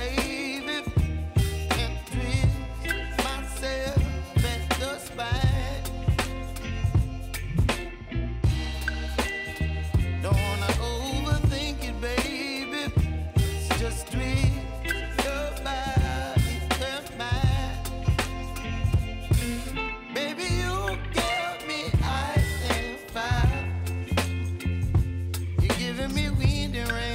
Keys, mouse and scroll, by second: 0.5 click, 1.0 space, 9.4 space, 10.8-14.1 drag, 14.1 j, 15.3-16.8 drag, 17.8 s, 18.3 click, 19.8 ctrl+z, 20.2-21.6 drag, 21.8 s, 22.4-24.6 drag, 25.1 space.